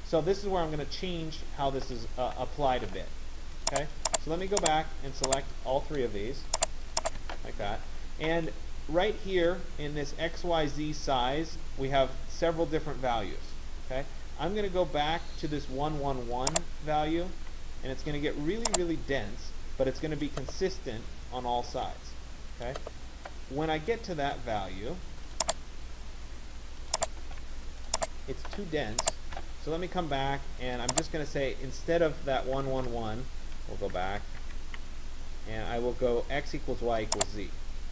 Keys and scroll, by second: 32.4 ctrl+z.